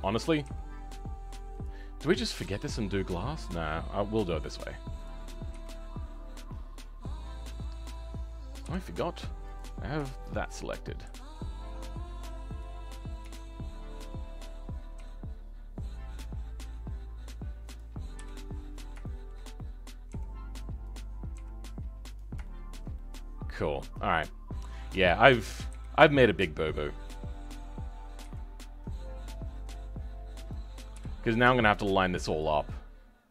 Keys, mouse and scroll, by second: 0.3 r, 10.0 shift+middle click, 11.0 g, 13.1 KP_1, 14.9 g, 18.1 KP_7, 18.6-18.9 scroll down 2, 18.9-20.0 shift+middle drag, 20.0 r, 22.3-25.6 shift+middle drag, 25.6 KP_1, 28.1 e, 30.9 KP_7, 32.1 g.